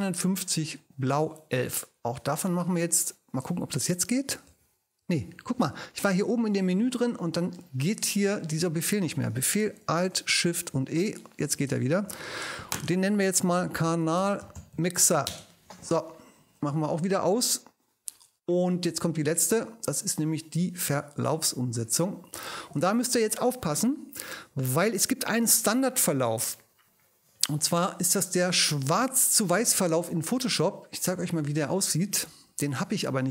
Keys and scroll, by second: 4.5 alt+shift+super+e, 10.6 alt+shift+super+e, 11.7 ctrl+alt+shift+super+e, 11.9 ctrl+alt+shift+super+i, 12.5 ctrl+super+i, 13.3-15.6 typing.